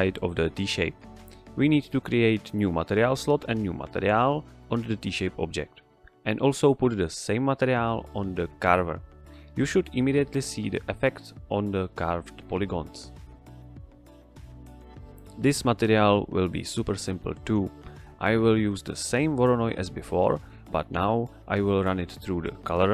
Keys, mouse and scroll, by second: 0.1 click, 1.8 click, 3.3-4.4 typing, 4.8 Return, 6.9 click, 13.7 click, 15.9 shift+a, 17.2 click, 20.0 ctrl+shift+click, 22.7 shift+a.